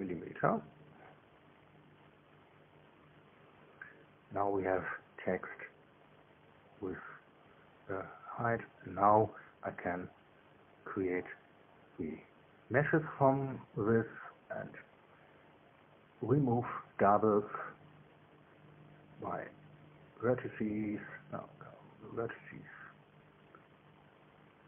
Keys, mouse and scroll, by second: 2.2 click, 3.2 1, 3.3 Return, 5.2-6.5 right drag, 8.9 right click, 10.1 alt+c, 10.8 click, 11.7 click, 12.5 alt+c, 13.2 click, 14.2 right click, 14.6 Tab, 15.5 middle click, 16.2 a, 18.4-19.8 drag.